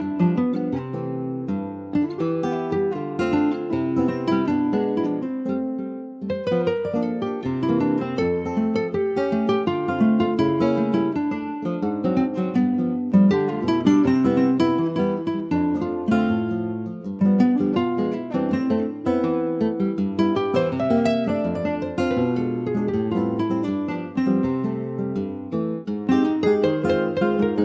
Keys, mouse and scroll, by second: 0.1 ctrl+s, 0.1 click, 0.5 alt+middle click, 0.8 alt+z, 1.2 alt+middle click, 1.4-2.1 alt+scroll up 1, 2.1 ctrl+s, 2.2 click, 2.5-2.8 scroll up 2, 2.8 shift+middle click, 3.4 ctrl+s, 3.4 click, 4.0 shift+middle click, 4.4-5.0 shift+scroll up 2, 5.0 ctrl+s, 5.7 shift+d, 6.9 ctrl+s, 7.3 click, 7.8 ctrl+s, 8.1 click, 8.4 alt+z, 9.0-9.7 scroll down 1, 9.7 ctrl+s, 10.3 alt+z, 11.4 click, 11.9 alt+z, 12.3 scroll up 1, 12.6 shift+middle click, 13.3-14.0 scroll up 1, 15.1 click, 21.2 click, 21.8 alt+z, 22.2-22.6 scroll down 2, 22.6 middle click, 22.9 alt+z, 23.2 click, 24.2 click, 24.4 click, 25.3 alt+z, 25.6 click, 25.9 middle click, 26.2 scroll up 3, 26.6 shift+middle click, 27.1 middle click, 27.3-27.6 scroll up 1.